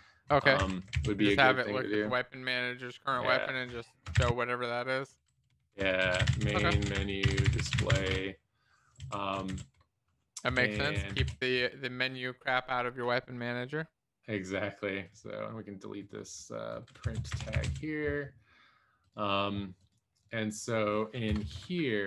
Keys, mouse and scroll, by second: 1.3 ctrl+s, 4.2-8.4 typing, 9.5 ctrl+., 10.8 Up, 10.8 Down, 11.0 e, 11.4 ctrl+s, 17.1 Down, 17.3 shift+Delete, 17.7 ctrl+s, 17.7 Down, 21.4 Return, 21.6 Up.